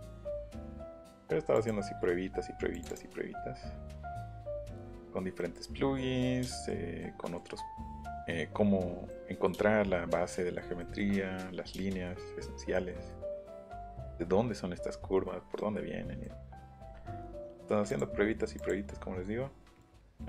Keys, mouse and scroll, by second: 0.9 click, 1.5 click, 2.5 click, 3.9 click, 5.4 middle click, 6.4 shift+middle click, 7.0 shift+middle click, 8.0 middle click, 9.1 middle click, 15.6 middle click, 15.9 middle click, 16.2 middle click, 17.9 click, 18.6 click.